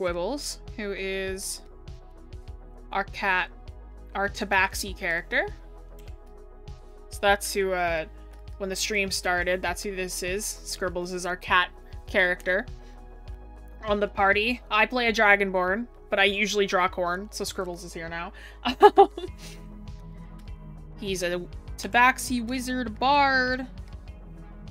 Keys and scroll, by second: 9.3-9.9 scroll, 14.7 scroll up 1, 15.0 scroll.